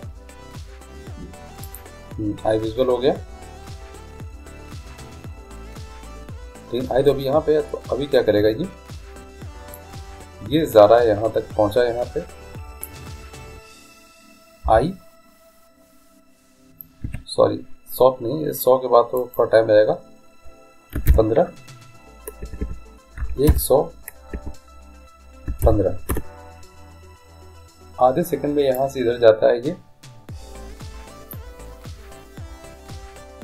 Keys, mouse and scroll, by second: 1.7-3.5 drag, 9.8-11.7 drag, 14.7 i, 19.3-21.1 drag, 22.7 BackSpace, 28.8-30.8 drag.